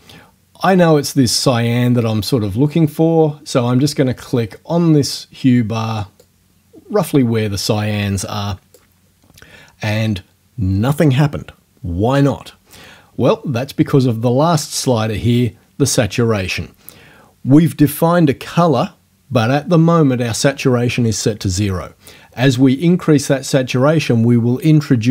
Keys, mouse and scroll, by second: 6.2 click.